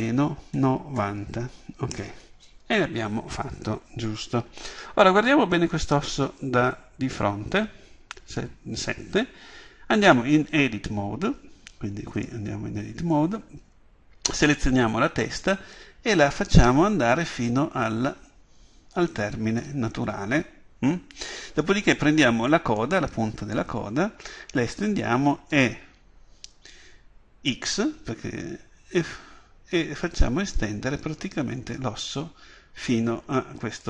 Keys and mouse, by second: 5.8 KP_7, 12.2-13.2 drag, 13.9 click, 14.3-17.6 drag, 15.8 right click, 22.8-24.5 drag, 24.5 right click, 25.5 e.